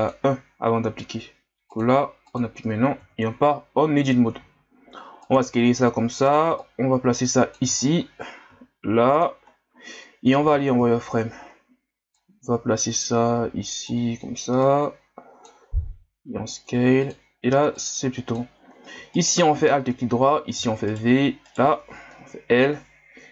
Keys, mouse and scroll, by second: 0.0-3.0 drag, 3.0 Tab, 4.4 s, 5.6 ctrl+scroll up 1, 6.6-7.8 drag, 7.8 scroll up 4, 8.5 s, 9.4 scroll up 7, 10.4 z, 10.9 ctrl+scroll up 2, 11.5 scroll up 1, 12.1-15.8 drag, 15.8 s, 17.7-19.1 drag, 19.1 alt+right click, 20.5 v, 21.4 right click, 22.1 l.